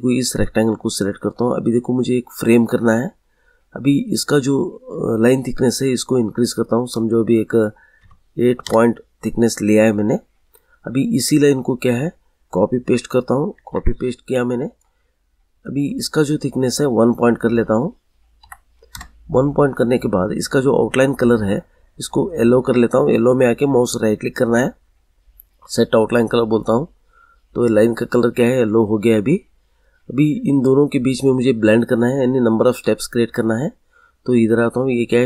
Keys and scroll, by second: 8.0 8, 8.5 Return, 13.1 ctrl+c, 13.4 ctrl+v, 18.3 1, 18.8 Return.